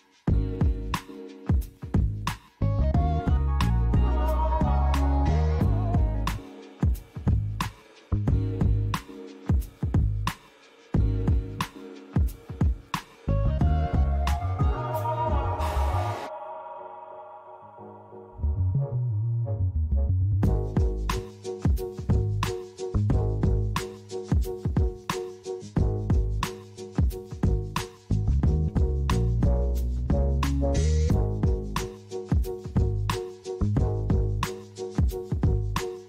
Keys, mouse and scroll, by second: 8.7 click.